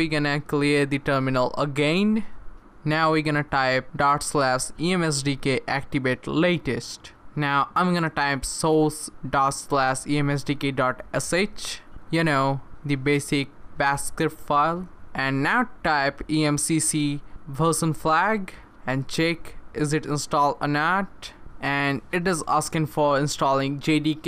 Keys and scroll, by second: 1.4 Return, 2.4-11.9 typing, 15.1-16.6 typing, 18.5-19.2 typing, 20.4 Return.